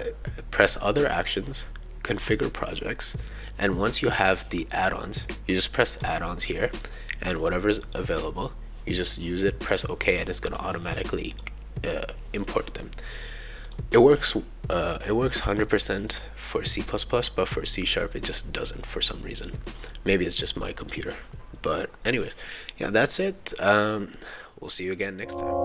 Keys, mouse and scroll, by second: 0.9 click, 2.2-3.4 drag, 6.0 click, 7.8 click, 9.7 click, 11.3 click, 13.6 shift+click.